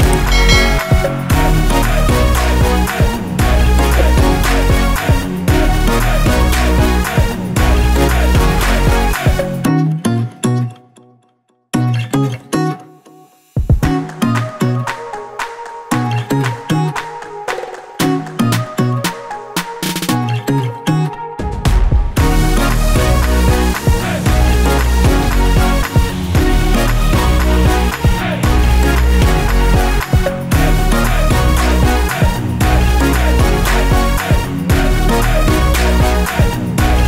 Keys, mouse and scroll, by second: 1.3 1, 2.5 8, 12.0 click, 13.6 click, 15.8 click, 17.1 scroll up 1, 18.2 scroll down 1, 18.5-19.1 scroll up 2, 19.1 scroll down 1, 19.8 scroll up 1, 20.4 scroll down 1, 20.8 click, 22.1 scroll up 1, 22.3 click, 23.2 scroll down 1, 24.0 click, 24.1 double click, 25.2 click, 28.4 click, 29.2 2, 32.2 click, 35.3 3, 36.9 click.